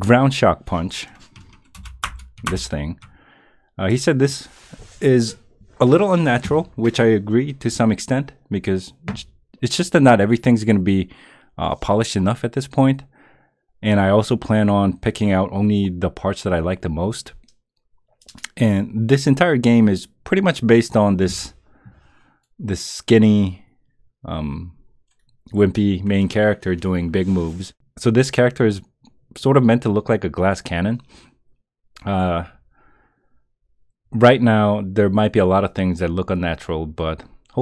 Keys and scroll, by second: 1.7 Return, 2.5 Return.